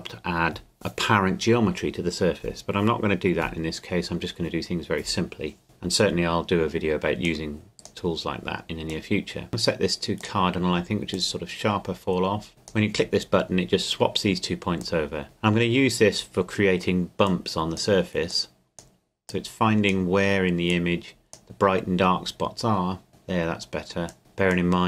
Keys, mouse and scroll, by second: 5.6 click, 7.2 click, 14.8 click, 17.3 click, 24.1 click.